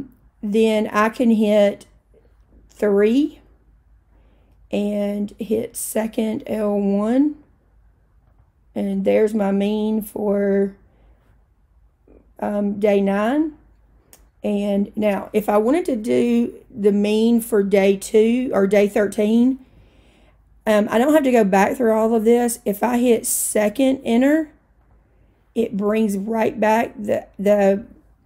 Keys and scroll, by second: 3.2 3, 7.0 1, 8.4 Return, 24.9 Return.